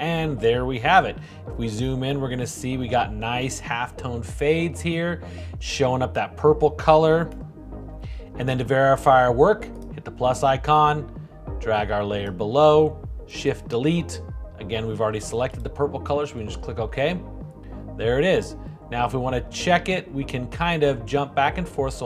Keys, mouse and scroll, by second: 13.3 shift+Delete.